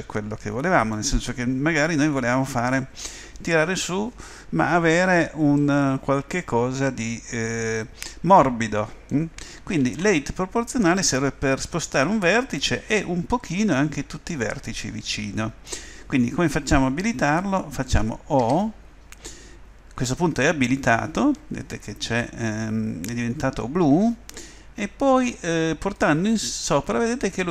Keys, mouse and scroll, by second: 0.2 middle click, 5.7 middle click, 5.9 middle click, 6.7 middle click, 8.5 middle click, 9.8 ctrl+z, 13.2 ctrl+z, 18.4 o.